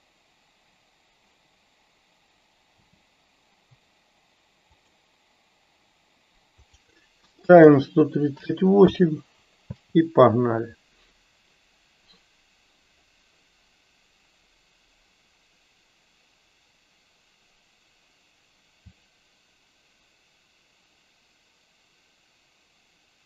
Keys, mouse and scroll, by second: 4.9 click, 6.9-9.1 drag.